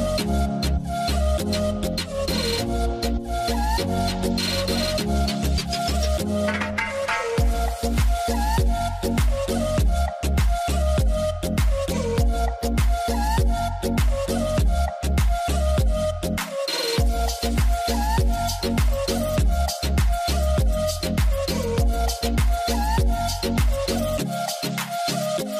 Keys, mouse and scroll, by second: 3.5 alt+scroll, 3.6 alt+scroll down 1, 4.1 alt+scroll up 1, 4.6 double click, 6.7 alt+scroll down 1, 6.9 alt+right click, 8.5 double click, 17.9-18.8 alt+scroll up 2, 17.9 middle click, 19.5 alt+scroll up 1, 20.8 alt+scroll down 1, 21.2-21.7 alt+scroll up 1.